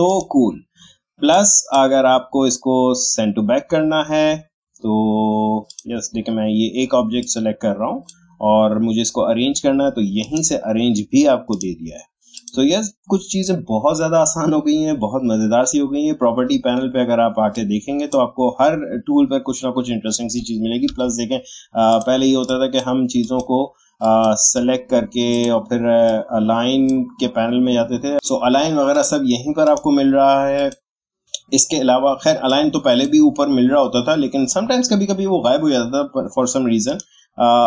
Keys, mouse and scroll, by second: 5.6-10.2 drag, 17.5-20.6 drag, 20.9 Delete, 21.9 click, 23.2-28.1 shift+drag, 28.9-35.7 drag, 36.8-37.6 drag.